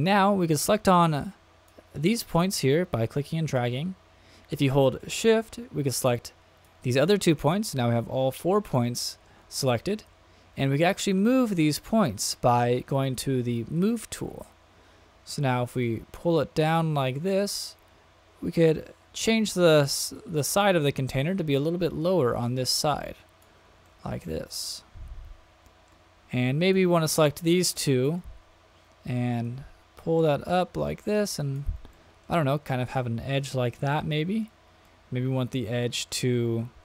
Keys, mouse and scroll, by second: 0.8 click, 2.9-3.6 drag, 5.9-6.8 shift+drag, 8.8 middle click, 9.5-10.0 shift+middle drag, 13.7 click, 15.8-19.3 drag, 19.8-20.5 shift+middle drag, 20.7-22.0 middle drag, 22.8 click, 23.8-24.3 shift+middle drag, 24.5-25.9 middle drag, 26.6 click, 27.7 shift+click, 29.4-31.6 drag, 31.9 shift+middle click, 32.4-34.4 middle drag, 34.8-36.1 middle drag.